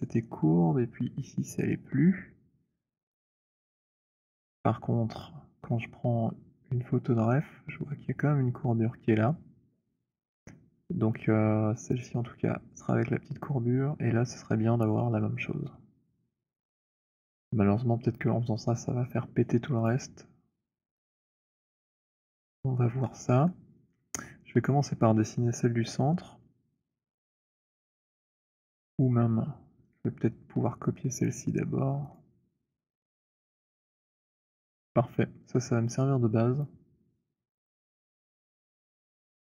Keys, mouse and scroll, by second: 3.3 click, 5.4 click, 19.8 click, 21.1 middle click, 22.0 alt+middle click, 22.5 middle click, 24.2 alt+middle click, 28.9 click, 29.8 click, 31.4 click, 32.1 shift+click, 33.4 middle click, 33.6 middle click.